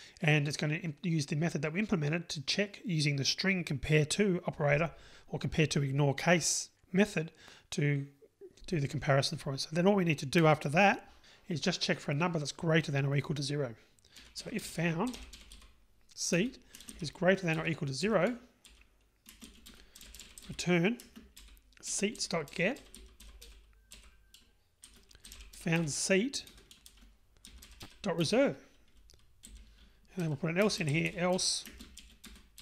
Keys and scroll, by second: 16.4 Return, 26.6 Return, 32.2 Return.